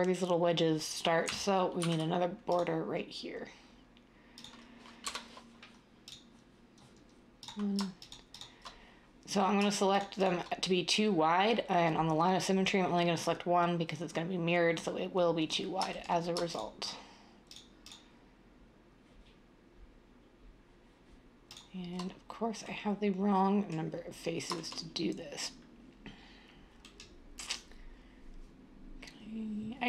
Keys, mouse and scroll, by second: 1.8 ctrl+r, 5.0 7.